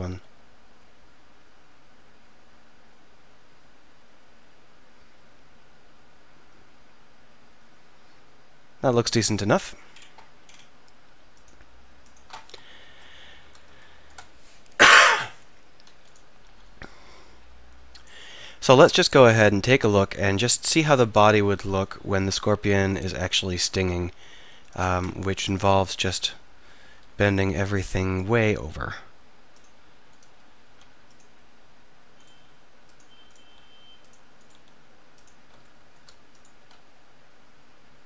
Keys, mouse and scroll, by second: 0.1 r, 9.5-10.1 drag, 10.1 middle click, 10.8-11.4 drag, 12.2 click, 12.9 KP_3, 13.5 z, 16.5 r, 17.7-18.1 drag, 18.5-19.7 middle drag, 20.7-21.1 middle drag, 23.6 r, 25.3 KP_1, 26.0 KP_3, 26.2 KP_Enter, 27.0 r, 27.7-28.1 drag, 28.5 r, 30.7 r, 32.4 r, 33.5 r, 34.6 r, 35.7-36.4 middle drag, 36.4-38.0 drag, 36.6 r.